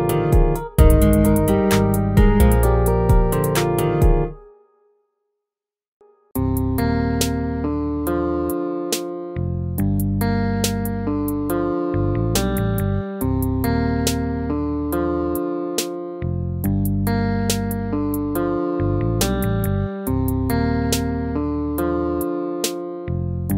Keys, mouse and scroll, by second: 11.8 ctrl+-, 22.0 ctrl+z.